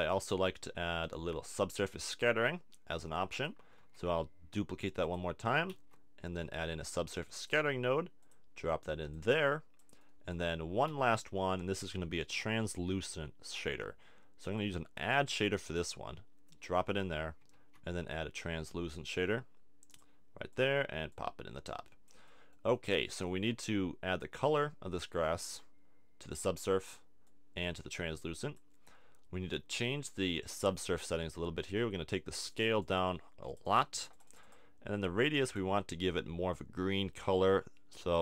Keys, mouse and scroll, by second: 0.7 middle click, 1.8-3.6 drag, 3.8 shift+d, 5.1-6.8 drag, 5.7 shift+a, 8.3-9.3 drag, 9.8-10.8 drag, 11.0 shift+a, 16.9 click, 17.5 shift+a, 20.6-22.1 drag, 22.3 click, 24.4-28.8 drag, 28.8-32.5 middle drag, 32.5-37.3 drag.